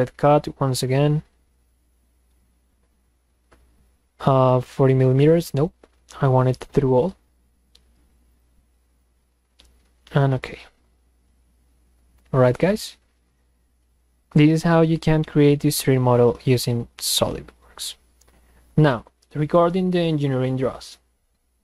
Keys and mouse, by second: 5.6 click, 6.7 click, 8.3 click.